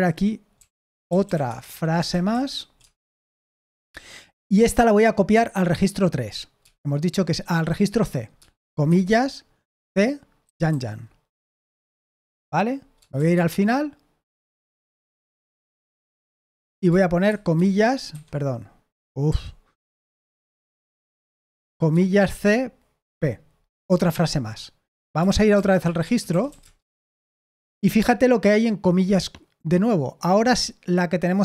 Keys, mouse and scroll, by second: 0.0-4.0 typing, 9.6-10.6 typing, 13.1 shift+g, 14.4 p, 15.5 u, 16.3 o, 17.2 shift+', 18.0 Escape, 19.2 typing, 21.4-23.0 typing, 25.2-26.9 typing.